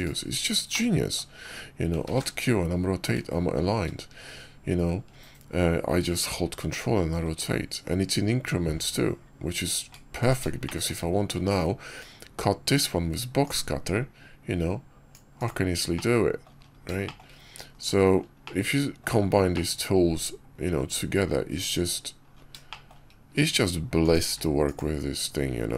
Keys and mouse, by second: 0.6 click, 2.0 ctrl+q, 8.0 ctrl+middle click, 10.5 shift+middle click, 11.3 Tab, 13.3-15.4 drag, 15.8-16.4 drag, 16.9 shift+click, 17.6 KP_5, 18.3-18.9 drag, 19.4-20.7 drag, 22.6 shift+drag, 24.0 click, 24.2 q.